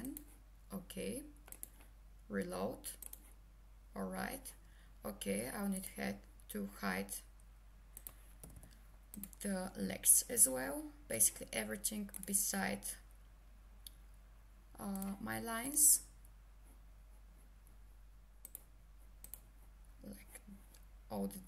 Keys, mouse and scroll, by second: 0.0 click, 5.8 click, 8.4 h, 9.1 click, 18.4 click.